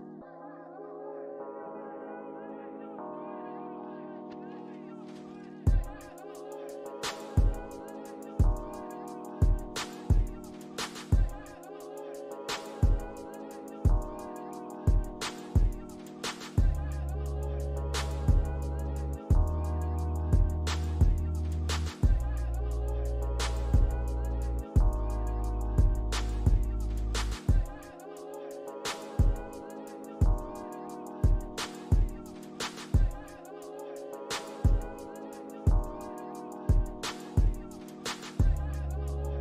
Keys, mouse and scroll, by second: 3.8 scroll up 1, 4.7 alt+click, 11.2 alt+middle click, 11.5 alt+scroll up 1, 12.1 alt+click, 12.4 alt+right click, 15.4 Escape, 17.3 Escape, 20.1 right click, 23.7 alt+click, 28.3 double click, 29.6 alt+click, 31.5 alt+scroll down 1, 32.8 alt+middle click, 33.1 alt+click, 34.3 alt+scroll down 1, 35.1-36.4 typing, 35.8 scroll down 1, 36.1 alt+click, 38.4 scroll up 1, 39.2 alt+click.